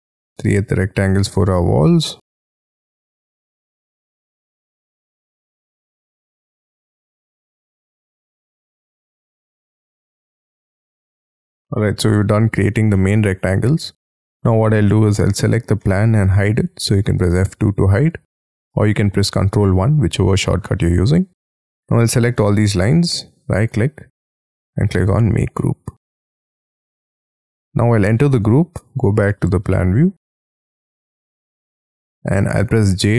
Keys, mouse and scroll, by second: 0.0-1.4 scroll up 4, 1.4-1.7 scroll down 4, 1.7-2.2 scroll up 10, 3.0 scroll down 13, 3.3 scroll up 5, 3.8 scroll down 6, 4.0 scroll up 2, 4.7-5.5 scroll up 19, 5.9-6.5 scroll down 13, 6.5-8.2 scroll up 1, 8.6-9.2 scroll up 13, 9.2-9.6 scroll down 19, 9.8-10.8 scroll up 22, 11.0-12.9 scroll down 10, 13.0 middle click, 14.4 space, 15.8 middle click, 17.1 F2, 17.8 scroll down 7, 20.4 middle click, 22.8-23.5 scroll up 5, 23.5 right click, 25.6 middle click, 27.0-28.3 scroll up 5, 28.5 double click, 32.1-33.1 scroll up 14.